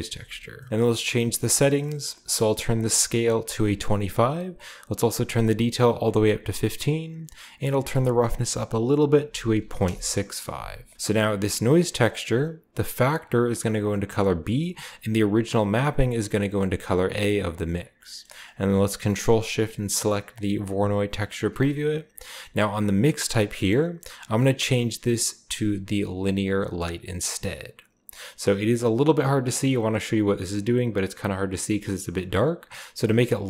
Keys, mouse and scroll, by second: 0.1-2.7 scroll up 1, 2.7 click, 3.4 typing, 3.7 click, 5.3 click, 7.7 click, 9.1-9.7 typing, 9.8 Return, 10.7 scroll down 1, 11.2 click, 12.9-14.4 drag, 15.2 click, 15.9 click, 17.3 click, 18.0-21.3 middle drag, 21.3 ctrl+shift+click, 22.2-23.4 middle drag, 22.5-23.4 scroll up 1, 23.4-26.0 scroll up 1, 23.9 click, 27.1 click, 28.4 scroll up 1, 29.5-30.6 drag, 30.4 right click, 31.9-33.1 scroll down 2, 33.1 click.